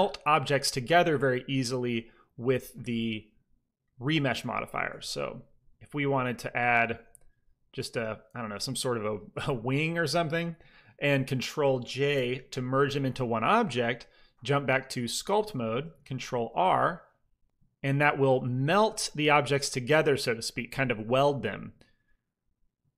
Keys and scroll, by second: 4.6 s, 4.8 x, 6.1 r, 7.4 g, 12.0 ctrl+j, 12.0 typing, 16.4 ctrl+r.